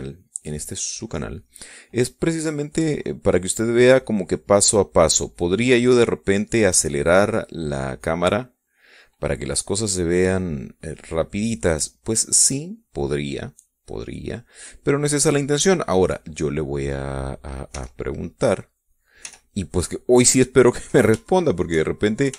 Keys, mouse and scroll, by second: 2.8 click, 4.3-9.6 drag, 10.0-15.3 drag, 16.2-17.3 drag, 18.4 e, 18.7-20.0 drag, 19.9 e, 21.0 click, 22.0 shift+click.